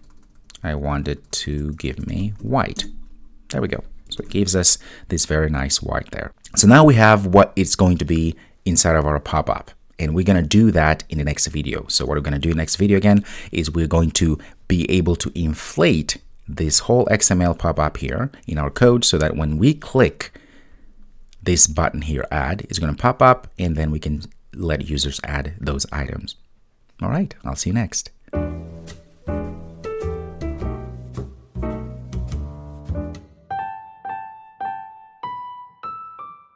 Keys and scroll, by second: 4.3 super+s.